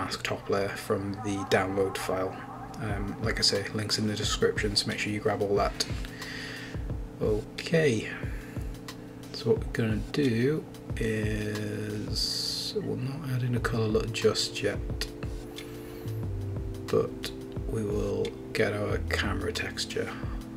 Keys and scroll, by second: 5.7 Return.